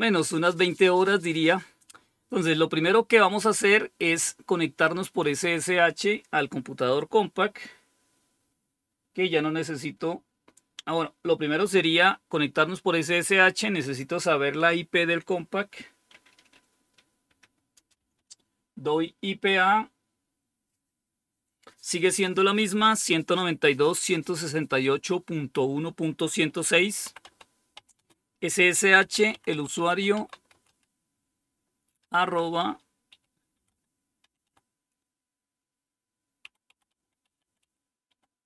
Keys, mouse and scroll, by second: 4.0 click, 27.1-27.9 typing, 28.9-30.6 typing, 31.9 typing, 33.0-33.6 typing, 36.3-38.4 typing.